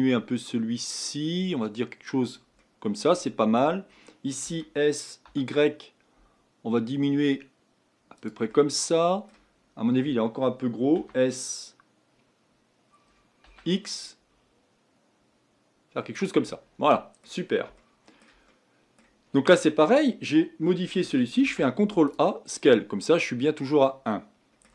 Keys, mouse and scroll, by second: 2.6-4.4 middle drag, 4.4 s, 8.5-9.5 middle drag, 9.5 scroll up 2, 10.9 s, 16.5-21.4 middle drag, 21.4 ctrl+a, 24.1-24.7 middle drag.